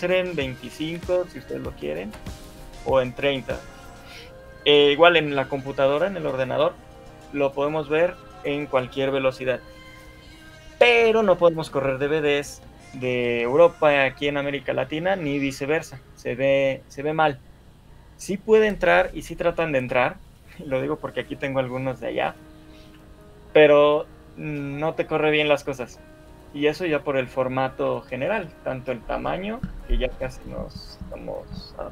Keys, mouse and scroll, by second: 14.0 scroll up 2, 14.3 shift+middle click, 18.5 scroll up 1, 18.9 shift+middle click, 22.7 shift+middle click, 26.1-26.7 scroll up 1, 26.7 shift+middle click, 28.3 shift+middle click.